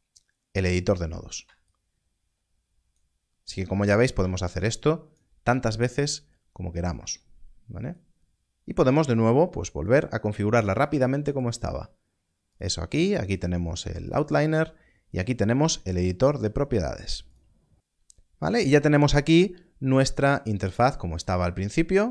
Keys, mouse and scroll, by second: 1.6 ctrl+click, 4.2 ctrl+click, 17.2 click, 20.2 shift+middle click, 21.4-22.1 scroll down 1.